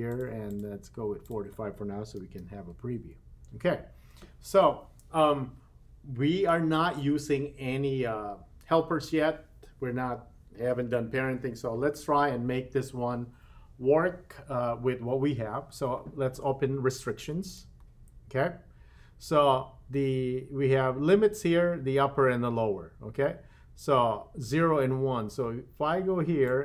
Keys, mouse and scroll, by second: 0.5 click, 1.2-3.1 drag, 17.5 click, 26.4-26.6 drag.